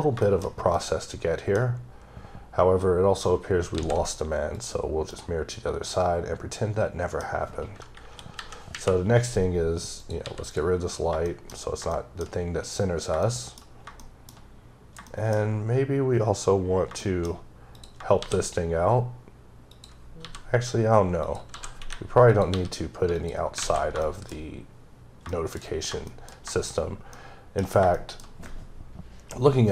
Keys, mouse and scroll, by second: 0.2 shift+middle click, 0.4 shift+scroll down 2, 0.7 middle click, 3.8 alt+x, 4.6 click, 5.1 middle click, 8.0 KP_7, 8.7 KP_Decimal, 10.0 click, 10.3 x, 10.5 click, 10.9 scroll up 3, 11.3 shift+middle click, 11.5 scroll down 2, 11.9 shift+middle click, 13.2 shift+double middle click, 14.0 shift+middle click, 14.7 scroll down 1, 15.1 shift+middle click, 16.2-16.5 scroll up 2, 16.9-17.8 scroll up 3, 17.0 shift+middle click, 17.8 click, 18.2 shift+d, 19.7 click, 20.2 g, 21.3 click, 21.5 s, 22.3 click, 22.5 g, 23.2 click, 23.5 scroll down 3, 23.6 a, 24.0 shift+middle click, 25.3 shift+double middle click, 26.1 shift+middle click, 27.2 shift+middle click, 27.7 shift+scroll down 2, 28.0 shift+middle click, 29.0-29.5 scroll up 2, 29.5 scroll down 1.